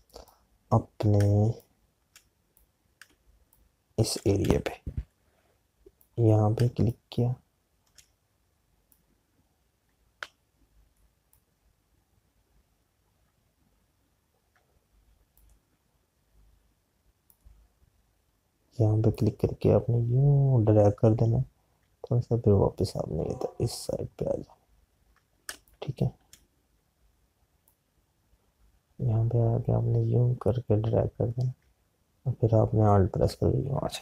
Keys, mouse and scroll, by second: 1.2 click, 2.2 space, 5.9 p, 7.1 click, 8.2 space, 9.8 click, 12.7 alt+click, 17.8 click, 26.7 click.